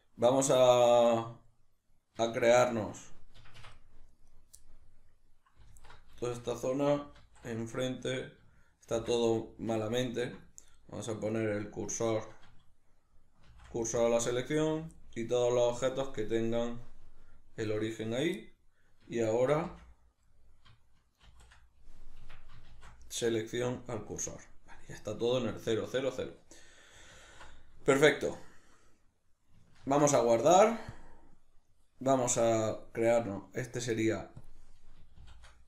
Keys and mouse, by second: 2.3 shift+a, 4.3 right drag, 4.6-10.7 middle drag, 5.7 alt+q, 7.2 alt+q, 8.9 shift+c, 10.7 right click, 11.3 right click, 12.0 right click, 13.5 shift+s, 15.0-16.2 middle drag, 16.2-18.4 drag, 18.4-35.6 middle drag, 19.5 shift+c, 27.1 alt+q, 29.8 ctrl+s.